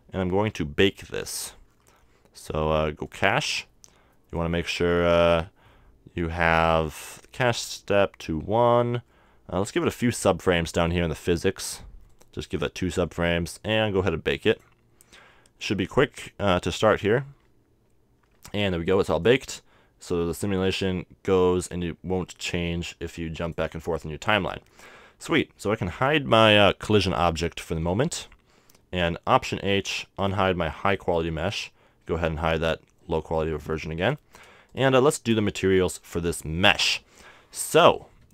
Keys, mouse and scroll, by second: 0.4-3.1 middle drag, 3.1-4.9 drag, 4.8 middle click, 9.0 middle click, 12.1-14.2 drag, 14.5-17.8 drag, 19.2-21.0 drag, 23.4-25.4 drag, 25.3-27.1 right drag, 27.7 h, 29.5 alt+h, 30.2-33.3 right drag, 32.4 h, 33.4-34.7 middle drag, 34.7-36.5 right drag, 36.8-38.3 middle drag.